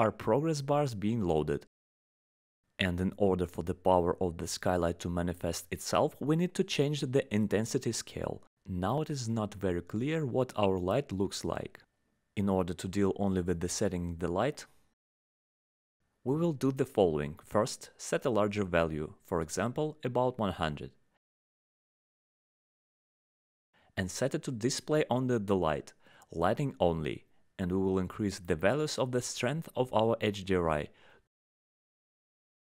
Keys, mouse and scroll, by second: 12.1 click, 19.9 click, 29.6 click.